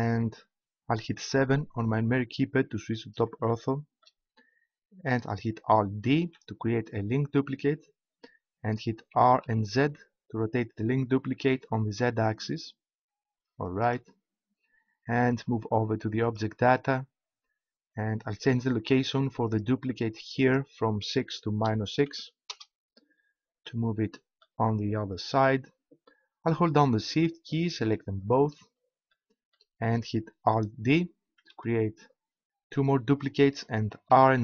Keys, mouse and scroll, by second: 1.5 KP_7, 6.1 alt+d, 13.8-15.5 drag, 28.1-30.1 right drag, 29.1-30.1 drag, 31.4 alt+d.